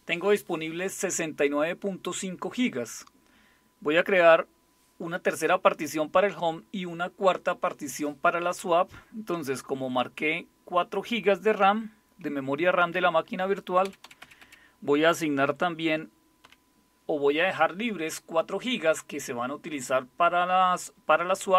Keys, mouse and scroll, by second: 13.8 Left, 14.0 Left, 14.2 Left, 14.4 Left, 15.4 Delete, 16.4 5.